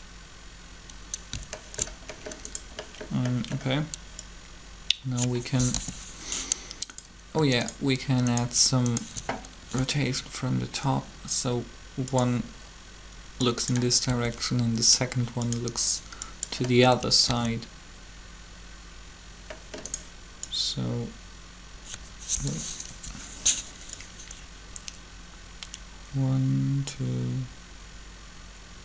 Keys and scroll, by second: 5.5 7, 9.6 shift+r, 14.1 r, 17.3 alt+a, 22.8 7.